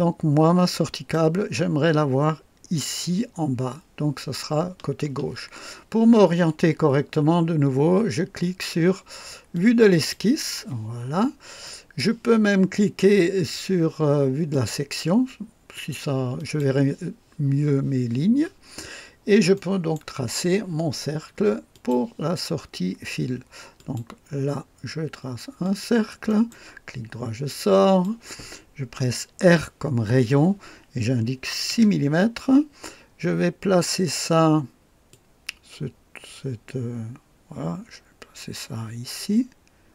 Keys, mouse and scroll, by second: 9.5 click, 11.1 scroll up 1, 11.6 right click, 14.4 click, 15.7 click, 16.3 click, 19.0 scroll up 1, 19.5 right click, 21.7 click, 23.7 click, 25.6 click, 26.2 right click, 27.8 click, 29.4 r, 31.4 KP_6, 31.7 Return, 35.0 click.